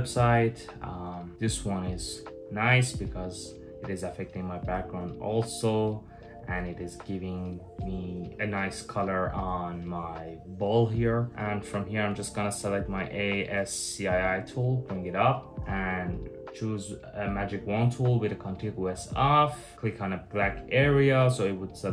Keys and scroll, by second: 15.5 w.